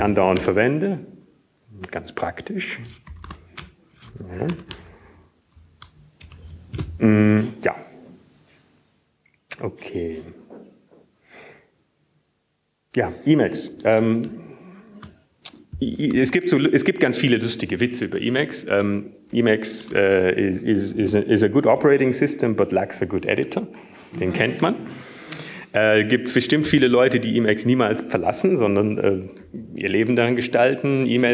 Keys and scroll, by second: 0.8 Return, 2.3 Up, 2.3 Return, 2.3 typing, 3.4 Tab, 6.2-7.1 typing, 8.6 Up, 8.6 ctrl+space, 8.6 ctrl+Down, 9.2 Down, 9.6 w, 9.6 BackSpace.